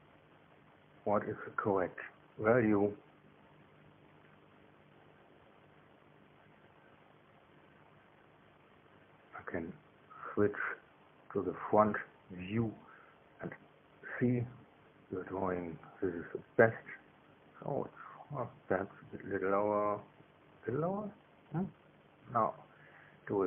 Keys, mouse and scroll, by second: 2.3-5.0 drag, 10.6 click, 11.4-12.4 drag, 13.0 KP_1.